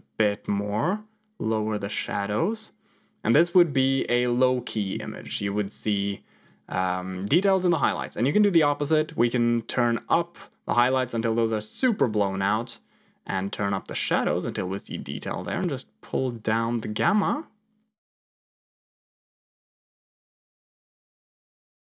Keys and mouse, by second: 0.4-2.7 drag, 10.0-12.0 drag, 12.9-14.7 drag, 15.4-20.8 drag, 21.4-21.9 drag.